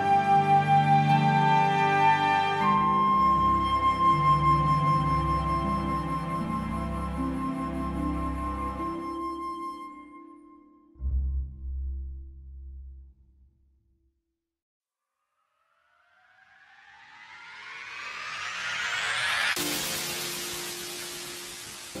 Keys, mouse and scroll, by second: 0.0 click, 0.2 click, 0.8 click, 0.9 shift+middle click, 1.0-1.5 scroll up 5, 1.2 shift+middle click, 1.6 click, 2.2 click, 2.6 r, 2.9 click, 3.2 alt+a, 3.3 scroll down 6, 3.4 shift+middle click, 3.5 scroll up 4, 3.6 shift+middle click, 4.6 shift+middle click, 4.7 middle click, 5.1 scroll up 2, 5.2 click, 5.3-5.8 scroll down 2, 5.5 alt+a, 6.1-6.5 scroll up 1, 6.5 scroll down 1, 6.8 middle click, 7.3 scroll up 1, 7.4-8.0 scroll down 6, 7.8 alt+a, 8.0 scroll up 2, 8.0 middle click, 8.7 scroll up 1, 8.9-9.3 scroll down 2, 9.0 scroll up 1, 9.4 ctrl+space, 9.5 scroll down 3, 9.7 middle click, 21.4 scroll down 10, 21.6-22.0 scroll up 5.